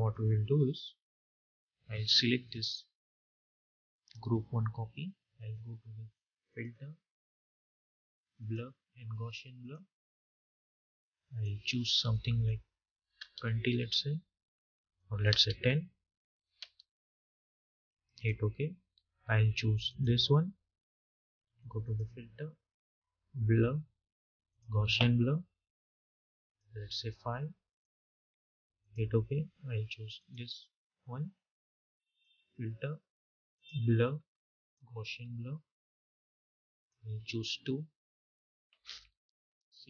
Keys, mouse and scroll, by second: 2.3 click, 6.3-14.8 drag, 14.8 click, 24.3-38.1 drag.